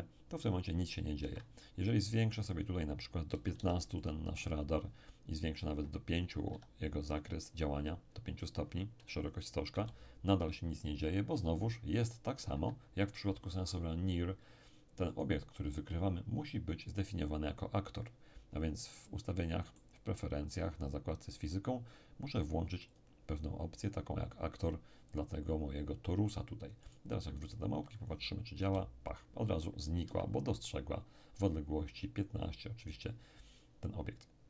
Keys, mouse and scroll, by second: 1.2 Escape, 2.5 click, 3.3 1, 3.5 5, 4.0 click, 5.4 click, 6.5 5, 7.1 click, 9.7 p, 12.5 Escape, 15.1 right click, 18.9-20.5 middle drag, 20.5 click, 20.5-21.6 right drag, 22.9 click, 26.9 right click, 28.6 p, 30.0 Escape.